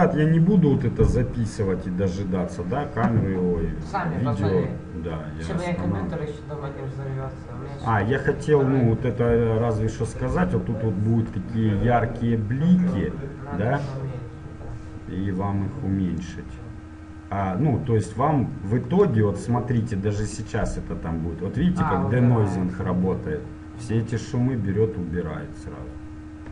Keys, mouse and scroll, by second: 16.4-18.4 drag, 17.4-19.3 middle drag, 19.4-20.0 scroll up 1, 20.0-21.8 middle drag.